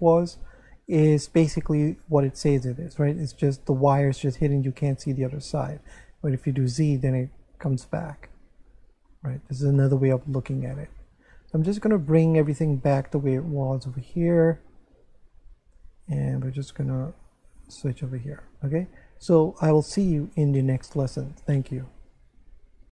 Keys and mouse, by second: 1.6 middle click, 5.5 z, 7.4 z, 7.9 middle click, 9.8 middle click, 11.9 click, 13.9 click, 16.7 click.